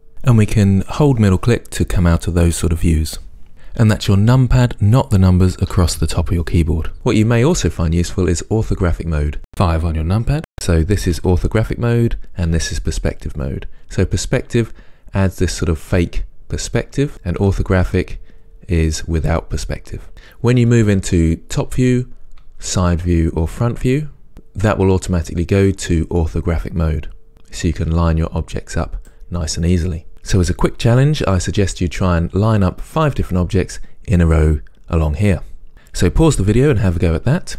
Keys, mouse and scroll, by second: 1.9-4.1 middle drag, 10.9 KP_5, 17.5 KP_5, 21.6 KP_7, 22.4 KP_1, 23.9 KP_3, 24.3 KP_1, 28.6-30.1 drag.